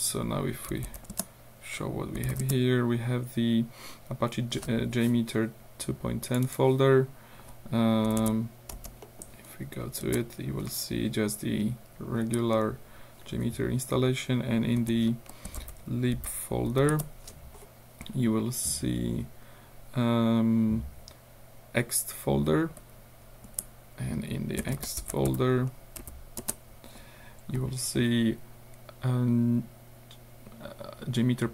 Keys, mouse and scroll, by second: 0.0 click, 0.5-2.8 typing, 6.3 middle click, 8.1 l, 8.8 space, 9.1 middle click, 10.1 Return, 12.3 Up, 15.5 l, 15.6 Tab, 16.7 b, 16.9 Return, 18.1-18.8 scroll up 2, 19.0-19.5 scroll up 2, 20.1-20.5 scroll down 2, 23.5 Up, 24.6-26.1 typing, 26.4 Return.